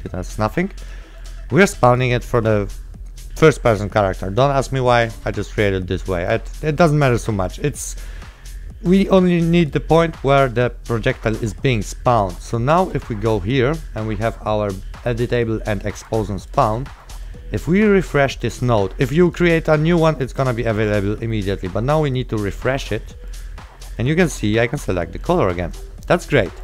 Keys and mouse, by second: 1.0 click, 3.6 right click, 6.2 right click, 9.0 click, 11.6 right click, 13.0 click, 16.1 click, 17.1 right click, 19.3 click, 23.4 click, 23.9 right click, 24.3 click, 26.1 right click.